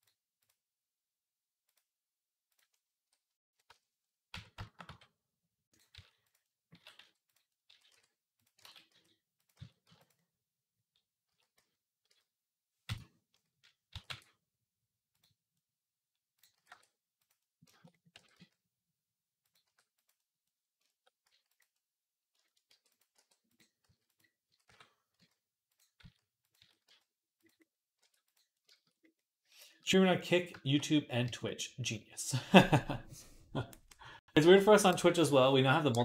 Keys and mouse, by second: 0.4-1.5 drag, 2.4-4.6 drag, 3.1 KP_3, 3.5 Tab, 4.1 Tab, 4.6-17.2 middle drag, 4.7 g, 5.7 s, 6.6 s, 7.5 s, 8.4 ctrl+z, 8.7 s, 9.4 s, 11.1 s, 13.7 s, 16.3 s, 17.3 shift+middle click, 18.0 r, 19.4 g, 20.0 middle click, 21.1 s, 21.9-29.0 shift+drag, 22.5 g, 22.9 r, 23.6 s, 24.3 s, 25.8 s, 26.4 s, 27.8 r, 29.1 shift+click, 29.5-31.4 middle drag, 31.5-36.0 shift+middle drag.